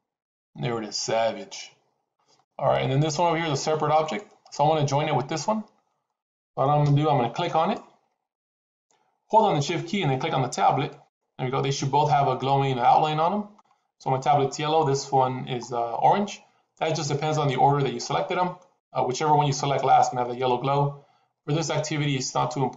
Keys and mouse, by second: 3.9 click, 5.9 middle click, 7.5 click, 8.2 click, 10.9 shift+click, 12.1-13.5 middle drag, 14.4 middle drag, 17.9-18.5 middle drag, 20.1-22.7 middle drag.